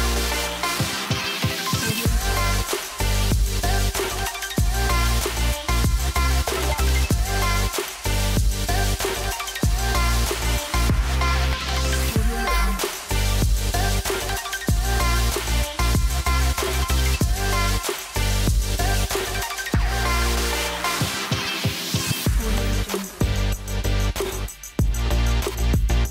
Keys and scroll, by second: 3.4 super+z, 5.2 super+z, 7.8 super+z, 10.2 super+z, 12.2 super+z, 13.9 super+z.